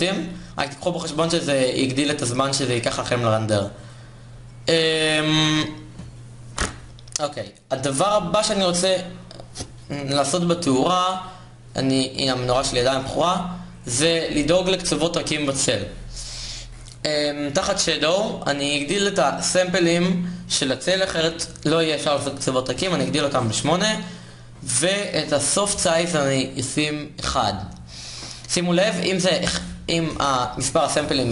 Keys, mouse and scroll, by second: 10.4 shift+z, 12.6 shift+z.